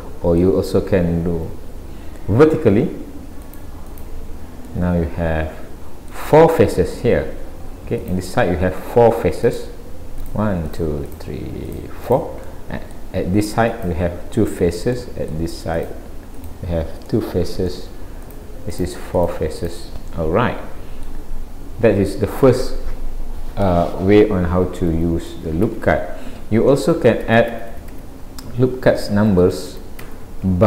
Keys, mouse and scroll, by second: 1.3 ctrl+r, 4.7 middle click, 8.1 click, 9.5 click, 10.2 click, 10.7 click, 11.1 click, 11.7 click, 12.1 click, 12.5 middle click, 13.7 click, 14.4 click, 15.0 middle click, 15.8 click, 16.4 click, 17.1 middle click, 18.3 click, 18.7 click, 19.2 click, 19.6 click, 20.2 middle click, 24.9 ctrl+z, 27.0 ctrl+z, 28.5-29.1 scroll down 1, 29.2 ctrl+z.